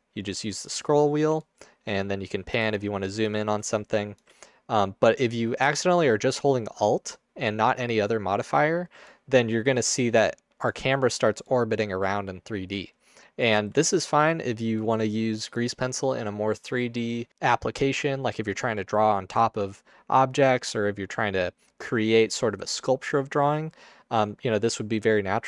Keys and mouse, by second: 12.2-13.4 alt+middle drag, 14.8 alt+click, 15.3 click, 17.4-18.9 middle drag.